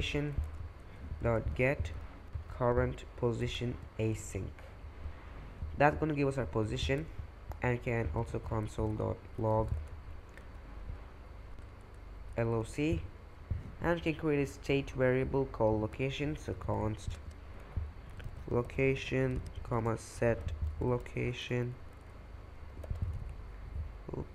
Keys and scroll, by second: 0.0-2.3 typing, 3.4 Return, 4.0 shift+9, 6.8 Return, 7.8-24.3 typing.